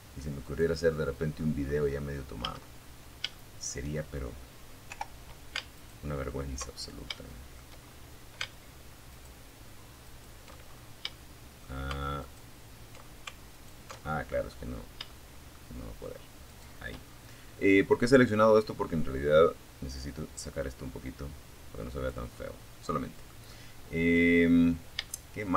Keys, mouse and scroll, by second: 0.6 a, 1.0 scroll up 1, 1.5 shift+middle click, 2.1-2.8 shift+scroll up 4, 3.1 o, 3.9 alt+shift+right click, 4.9 alt+shift+scroll up 2, 5.3 shift+middle click, 6.0-6.4 shift+scroll up 1, 7.3 alt+shift+middle click, 8.3 alt+shift+middle click, 8.9 alt+shift+scroll up 1, 9.3 shift+middle click, 10.4 alt+shift+right click, 11.7 alt+shift+right click, 12.2-13.1 alt+shift+scroll down 2, 13.3 shift+middle click, 14.7 shift+click, 15.3 shift+scroll down 1, 15.7-17.1 drag, 18.4-20.5 drag, 20.5-20.8 scroll down 1, 20.9 middle click, 21.8 middle click, 22.9 scroll up 1, 23.3-24.5 shift+middle drag, 24.5 scroll up 1, 24.9 a.